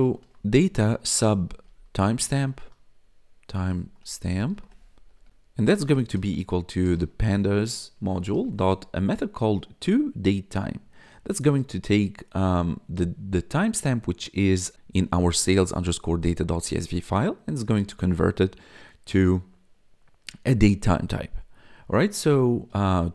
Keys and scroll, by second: 0.0-8.3 typing, 22.9 t.